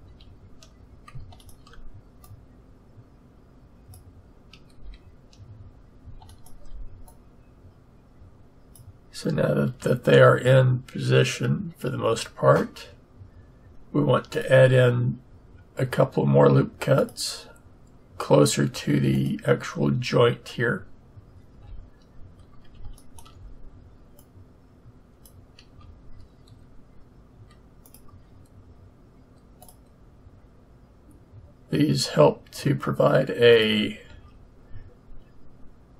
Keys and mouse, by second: 0.1 a, 3.6 click, 4.7 a, 8.2 click, 9.6 a, 14.3-16.1 drag, 21.5 a, 25.1 click, 25.8 a, 27.8-29.5 drag, 29.5 middle click, 34.1 a.